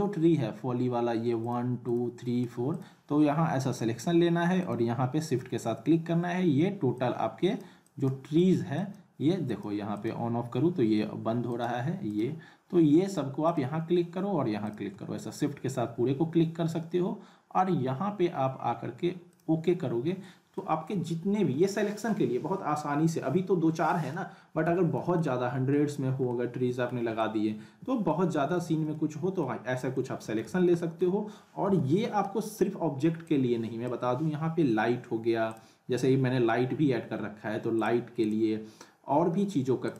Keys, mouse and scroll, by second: 1.4 click, 4.6 shift+click, 6.9-8.1 click, 19.3 click, 20.2-20.8 middle click, 20.9 z, 21.6-22.2 alt+middle drag, 24.6 z, 25.2-25.8 alt+middle click, 25.9 scroll down 1, 26.3-26.9 alt+middle drag, 28.1-28.5 scroll up 1, 28.5 z, 28.9-29.5 alt+middle click, 29.7 scroll up 1, 29.9-30.5 alt+middle click, 30.4 z, 30.8 alt+middle click, 31.6 h, 33.3-33.9 drag, 37.7 click.